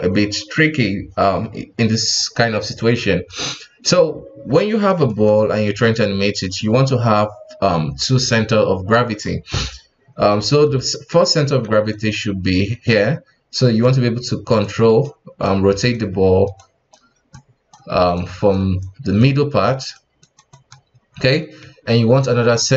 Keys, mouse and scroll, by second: 5.0-8.1 shift+middle drag, 11.6 d, 11.9 click, 12.8-22.5 typing, 14.6 click, 15.4 click, 16.6 click, 17.3 click, 18.2 click, 18.8 click, 19.6 click, 20.2 click, 20.5 click, 22.5-22.7 drag.